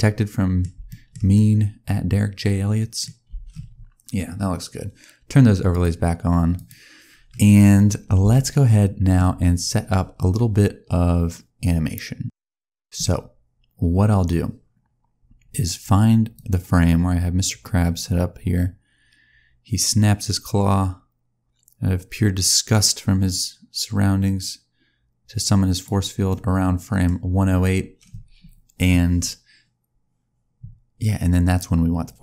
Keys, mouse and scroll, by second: 0.8 shift+middle click, 1.2 middle click, 3.2 space, 3.4-3.7 scroll down 1, 5.6 click, 6.4 click, 7.0-7.7 scroll up 2, 7.7 scroll up 1, 7.7-8.1 scroll down 1, 8.2 shift+middle click, 13.0-14.7 scroll down 1, 14.7-15.1 scroll up 2, 16.2 click, 26.2 middle click.